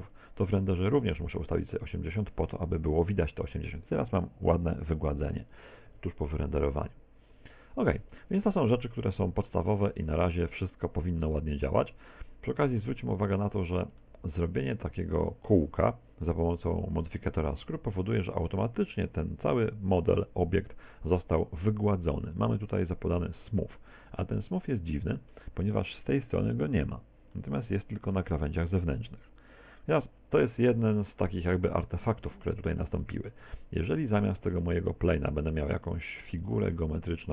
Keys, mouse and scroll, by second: 0.2 click, 5.9 Escape, 7.9 Tab, 8.3 Tab, 8.8 middle click, 9.7 Tab, 10.2 shift+middle click, 10.9 middle click, 13.2 middle click, 14.1 shift+middle click, 20.0 Tab, 23.9 middle click, 27.4 middle click, 31.6 middle click, 33.1 middle click, 33.5 Tab, 34.1 Tab, 34.5 Tab, 34.7 middle click, 35.4 middle click, 35.9 shift+middle click, 36.7 Tab, 37.1 Tab.